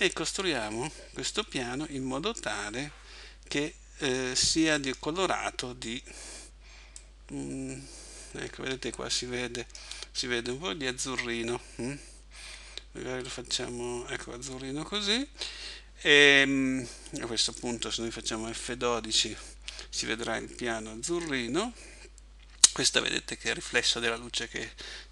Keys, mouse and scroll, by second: 4.8 click.